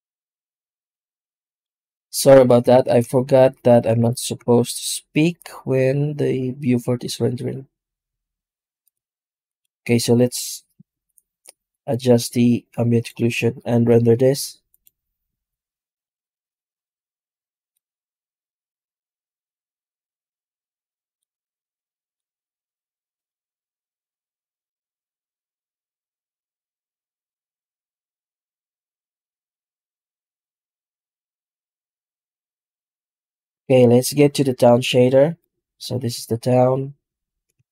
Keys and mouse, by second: 0.8 click, 1.0 click, 1.8 middle click, 3.2 shift+a, 3.9 shift+a, 11.9-12.9 drag, 13.9 z, 17.6-20.9 drag, 21.2 middle click, 23.8 click, 26.1 click, 27.5-29.0 drag, 30.3 z, 33.5-34.7 middle drag, 35.3 right click.